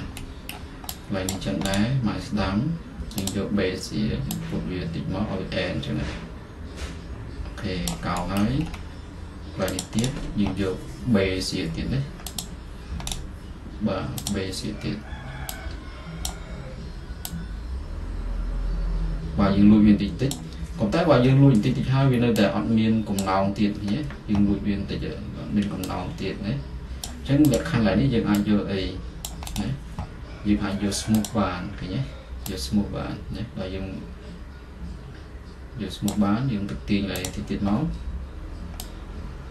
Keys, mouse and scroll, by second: 8.0 click, 8.7-10.0 middle drag, 10.0-12.2 drag, 12.2 right click, 12.5-18.5 drag, 20.4 click, 20.9-23.4 middle drag, 23.4-25.4 drag, 27.1-31.2 drag, 31.2-33.4 right drag, 36.2-39.5 drag.